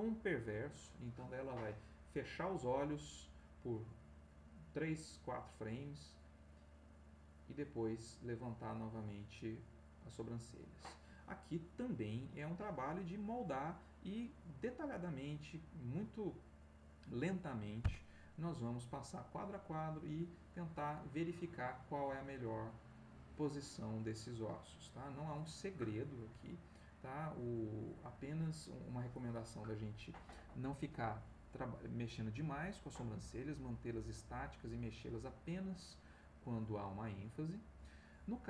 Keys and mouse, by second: 18.7-28.8 drag, 31.1-38.0 drag.